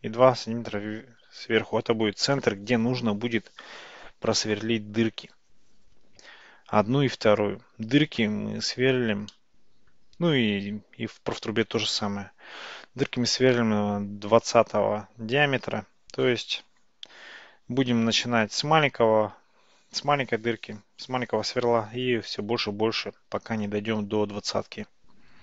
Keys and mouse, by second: 9.4-10.0 middle drag.